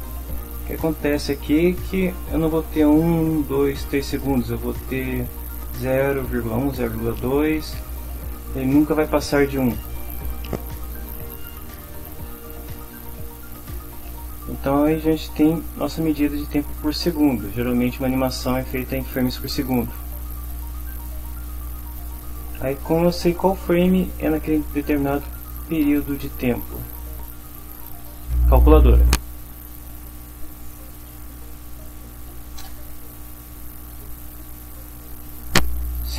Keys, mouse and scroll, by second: 30.6-31.9 typing, 32.0 Down, 32.7 Return.